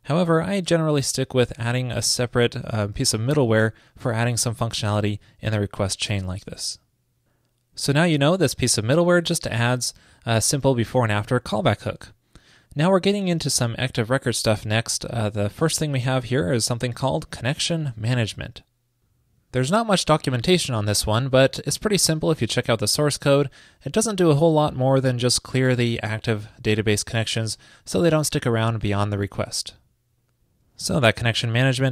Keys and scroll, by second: 9.5 super+v.